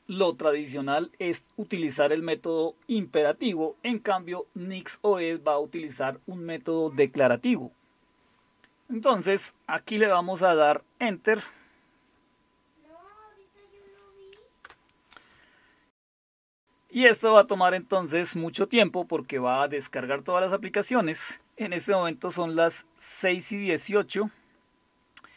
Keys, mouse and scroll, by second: 13.5 click.